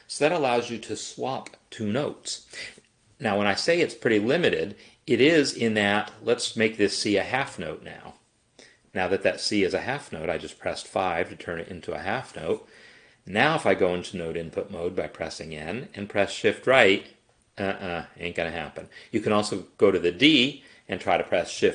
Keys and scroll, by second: 4.7 Escape, 7.5 6, 12.0 n, 16.7 shift+Right, 17.6 shift+Right, 18.5 shift+Right, 19.2 Right, 21.1 shift+Left, 21.6 shift+Left.